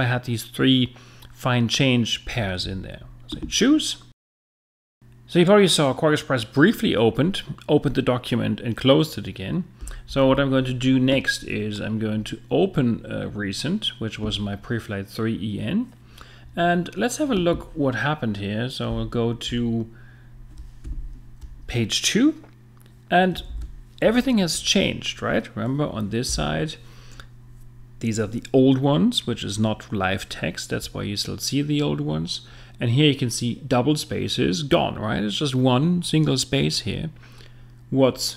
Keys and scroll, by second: 20.9 super+0, 26.3 F7.